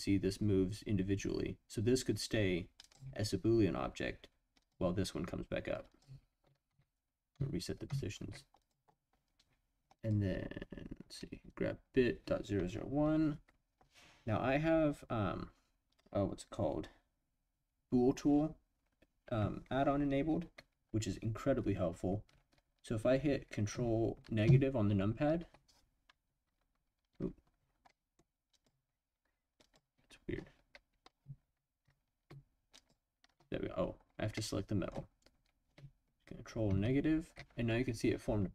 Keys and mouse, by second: 2.8 click, 4.6 click, 5.9 click, 6.7 ctrl+z, 7.3 ctrl+z, 7.9 ctrl+z, 8.6-9.2 drag, 9.9 click, 24.4 ctrl+KP_Subtract, 27.9 drag, 28.6-29.7 drag, 32.8 shift+click, 34.3-34.9 middle drag, 36.7 ctrl+KP_Subtract.